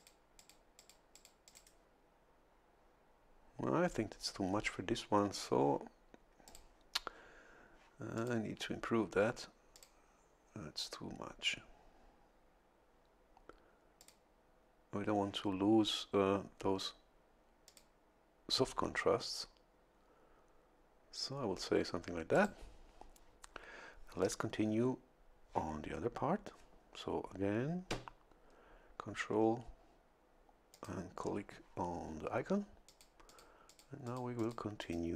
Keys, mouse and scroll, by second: 0.0 click, 0.4 click, 0.8 click, 6.5 click, 8.2 click, 9.7 click, 14.0 click, 17.7 click, 22.3 click, 30.7 ctrl+click, 32.9 click, 33.3 click, 33.7 click, 34.1 click, 34.8 click.